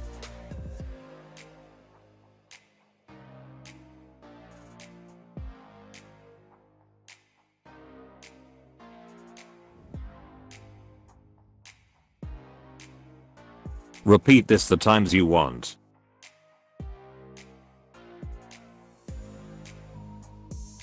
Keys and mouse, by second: 0.1 ctrl+c, 0.5 click, 1.4 ctrl+v, 1.9 drag, 2.1-3.4 typing, 2.6 drag, 3.2 click, 4.5 space, 5.0 click, 6.3 click, 6.3 space, 6.5 space, 6.6 click, 6.9 space, 8.1 ctrl+c, 8.2 ctrl+v, 8.6 click, 10.3 ctrl+c, 10.4 ctrl+v, 10.5 click, 10.7 space, 13.6 space, 14.0-14.8 drag, 15.3 ctrl+c, 15.7 ctrl+v, 16.2 click, 16.4 space, 17.5 space, 18.0-18.6 drag, 19.8 space, 20.5 drag, 20.7 click.